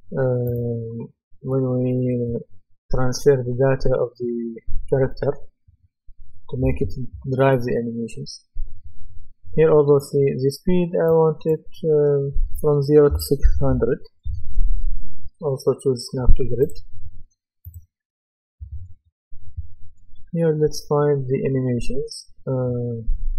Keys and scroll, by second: 13.1 KP_6, 14.2 Return.